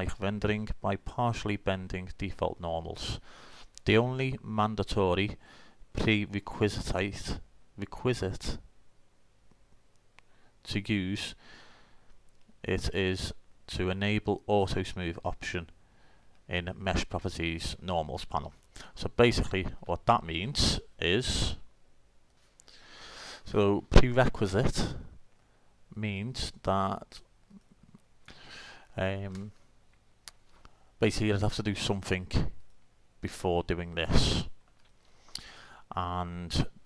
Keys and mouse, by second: 27.6-29.2 drag, 29.3-32.8 middle drag, 34.3 middle click.